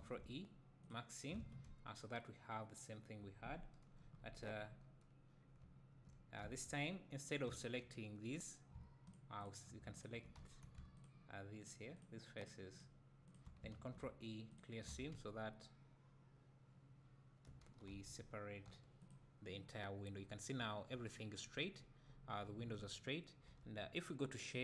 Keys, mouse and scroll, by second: 0.8 ctrl+e, 1.3 alt+a, 4.0 KP_1, 4.3 KP_3, 7.2 click, 9.1 shift+click, 10.4 `, 11.0 shift+click, 14.6 ctrl+e, 14.9 alt+a, 17.9 a, 19.1 u.